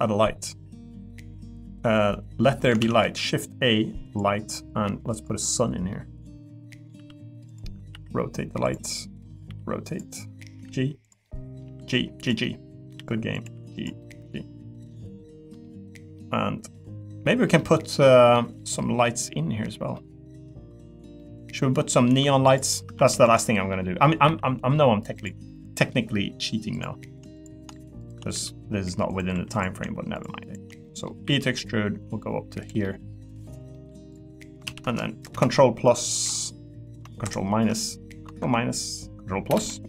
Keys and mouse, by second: 2.8 shift+a, 5.9 middle click, 6.7 middle click, 6.9 g, 7.9 r, 8.9 middle click, 9.4 r, 10.1 middle click, 10.5 g, 11.2 middle click, 11.6 g, 12.4 middle click, 12.9 r, 13.3 click, 13.4 g, 14.0 middle click, 15.5 middle click, 16.1 middle click, 17.6 middle click, 18.3 middle click, 19.0 middle click, 19.9-21.0 middle drag, 21.2 middle click, 22.4 click, 22.8 Tab, 23.1 3, 23.8 middle click, 24.2 e, 25.1 click, 25.5 middle click, 26.7 shift+click, 28.0 shift+click, 28.3 e, 29.1 click, 29.3 3, 30.1 shift+click, 30.5 shift+click, 30.8 middle click, 31.2 e, 32.8 middle click, 33.7 middle click, 34.6 ctrl+z.